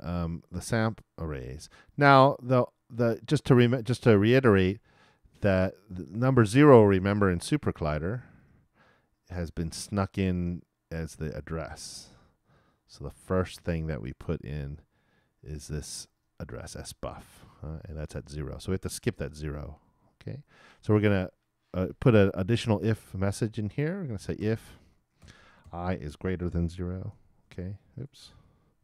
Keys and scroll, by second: 24.6-27.1 typing, 28.3 shift+BackSpace.